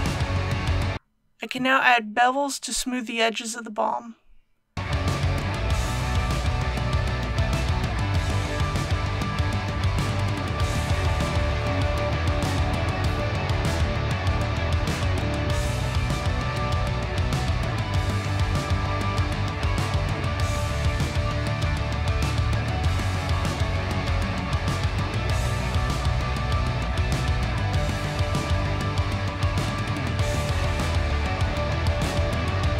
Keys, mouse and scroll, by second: 0.5 scroll down 1, 1.0 alt+click, 2.5 alt+shift+click, 4.8 alt+shift+click, 4.8 middle click, 4.9 scroll up 1, 4.9-5.4 scroll down 2, 5.0 alt+shift+click, 5.4 shift+middle click, 5.6 alt+shift+click, 5.7 middle click, 5.9 alt+shift+click, 6.8 middle click, 7.2 scroll up 1, 7.2 shift+middle click, 7.3 alt+shift+click, 8.4 middle click, 8.6 alt+shift+click, 9.2 middle click, 9.3 alt+shift+click, 10.0 shift+middle click, 10.2 middle click, 10.4 alt+shift+click, 10.6 middle click, 10.7 alt+shift+click, 11.2 shift+middle click, 11.4 alt+shift+click, 11.8 ctrl+z, 11.9 alt+shift+click, 11.9 ctrl+z, 12.0 middle click, 12.2 alt+shift+click, 12.5 middle click, 12.7 alt+shift+click, 13.2 middle click, 13.4 alt+shift+click, 13.5 ctrl+z, 13.6 alt+shift+click, 13.9 middle click, 14.2 alt+shift+click, 14.5 alt+shift+click, 14.8 middle click, 15.0 middle click, 15.1 alt+shift+click, 16.1 alt+shift+click, 16.2 middle click, 16.3 alt+shift+click, 16.4 scroll down 1, 16.5 middle click, 18.0 ctrl+b, 21.2 click, 24.6 KP_Decimal, 24.8 KP_0, 25.2 Tab, 25.9 KP_3, 26.4 Tab, 27.9 click, 28.8 KP_Decimal, 29.0 KP_0, 30.2 click, 30.9 KP_Decimal, 31.1 KP_0, 31.3 KP_1, 32.0 Tab.